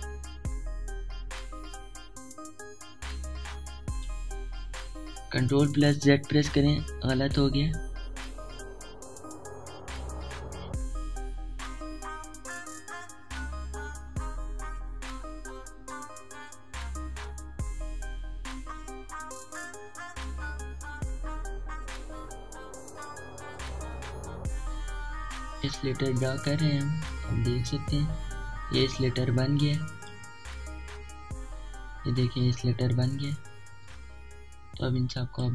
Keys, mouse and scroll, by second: 7.2 typing, 8.2 ctrl+z, 10.0 typing, 16.9-27.0 drag, 16.9 typing, 27.0 typing, 32.9-33.6 typing, 33.6 alt+scroll up 1, 34.3 alt+scroll up 1, 34.9-35.5 drag.